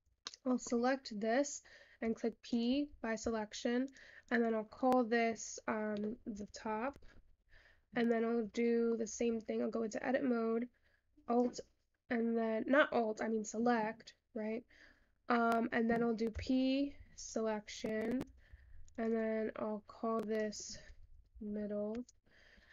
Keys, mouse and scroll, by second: 0.4 shift+middle click, 0.7 shift+scroll up 2, 2.1 p, 3.2 Tab, 3.9 click, 4.3-7.5 drag, 8.1 click, 8.7-9.1 shift+middle drag, 9.1-9.4 shift+scroll down 1, 9.4 Tab, 10.0-10.6 scroll down 1, 10.6 click, 18.5 Tab, 18.9-21.6 drag, 21.6 d.